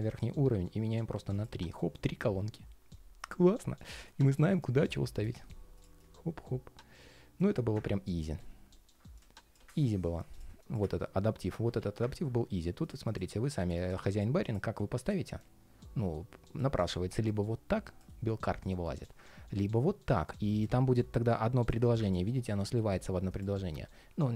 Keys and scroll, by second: 23.3 ctrl+shift+4.